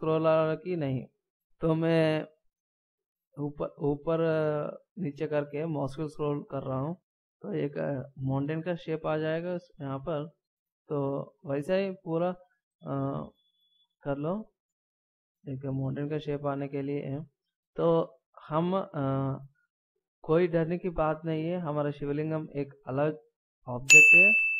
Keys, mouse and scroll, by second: 9.8 a, 10.5 middle click, 11.0 right click, 12.7 g, 17.2 right click, 17.3 g, 18.2 middle click, 22.0 right click, 23.8 g.